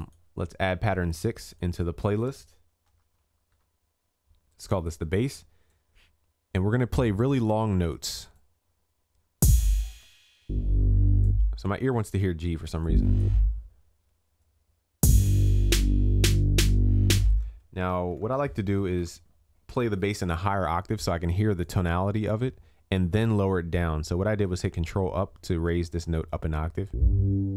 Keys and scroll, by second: 18.0 ctrl+a, 19.0 ctrl+Up, 19.7 ctrl+Up.